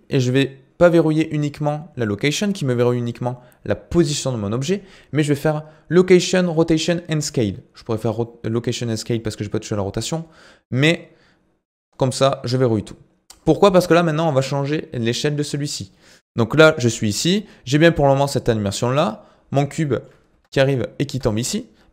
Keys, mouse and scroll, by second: 17.5-18.2 scroll down 2, 18.2 click, 19.1-19.8 scroll down 10, 19.8 shift+middle click, 20.3 space, 21.0 space.